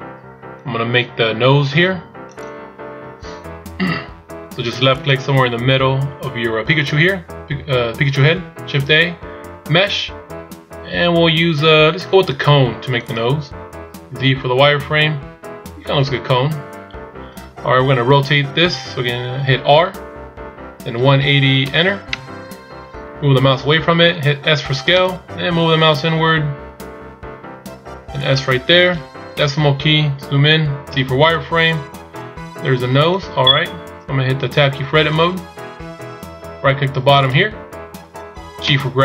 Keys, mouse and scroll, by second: 3.1 n, 5.1 click, 8.8 shift+a, 15.1-15.9 scroll up 2, 15.9-16.6 scroll down 3, 16.6 z, 29.5 KP_Decimal, 31.0 z, 31.8-32.7 scroll down 1, 35.4 Tab, 37.4 right click.